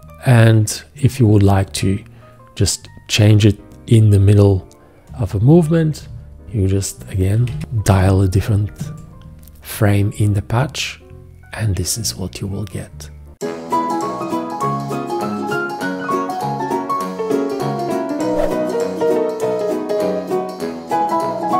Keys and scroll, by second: 7.4 1, 7.5 Return, 8.8 shift+..